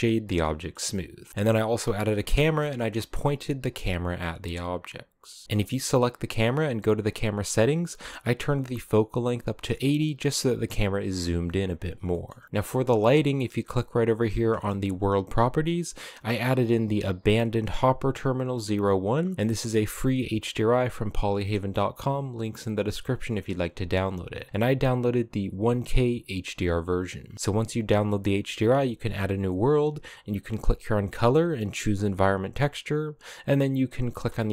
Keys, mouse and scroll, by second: 0.1 middle click, 0.5 a, 0.6-1.3 scroll down 2, 1.3 right click, 2.1 KP_0, 2.8-4.7 scroll down 2, 4.7-5.3 scroll up 1, 5.4-9.9 drag, 10.5-11.3 scroll down 1, 11.9 shift+middle click, 18.4-21.2 drag, 30.1-33.3 drag.